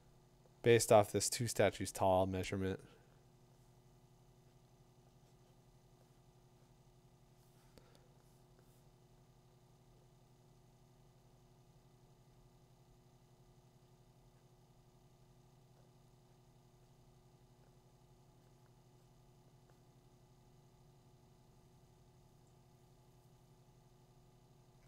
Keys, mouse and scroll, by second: 4.6-11.3 drag.